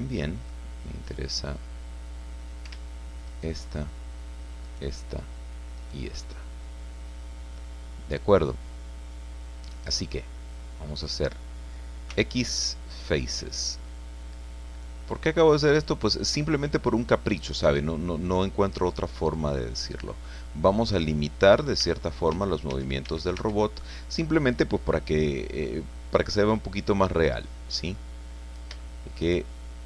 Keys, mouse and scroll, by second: 0.4-0.7 scroll up 2, 3.3 alt+shift+right click, 4.6 alt+shift+right click, 5.8 alt+shift+right click, 6.2 alt+shift+scroll down 1, 6.6-10.7 alt+shift+middle drag, 10.7 click, 12.1 x, 12.8 click, 13.5-13.9 scroll down 2, 13.9-18.4 drag, 18.6-19.5 scroll up 2, 19.5 middle click, 19.7 scroll down 1, 19.9 middle click, 20.9-21.2 scroll down 1, 21.2-22.3 middle drag, 21.8 a, 23.4 Tab, 23.9 scroll down 1, 24.8-28.1 drag, 28.4-28.7 scroll down 4, 28.8 shift+middle click, 29.1 shift+middle click.